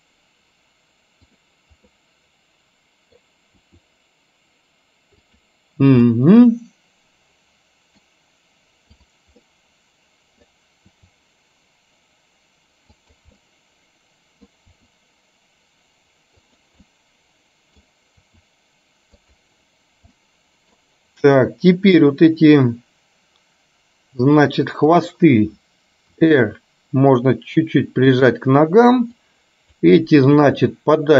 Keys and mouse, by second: 1.3 click, 2.1-3.2 middle drag, 3.8 r, 6.2-8.1 middle drag, 9.1 click, 9.6 middle click, 11.1 r, 13.4-14.6 middle drag, 14.8 r, 16.9-17.9 middle drag, 18.3 r, 20.3 middle click, 24.6 click, 26.3 r, 29.3 click, 30.6 r.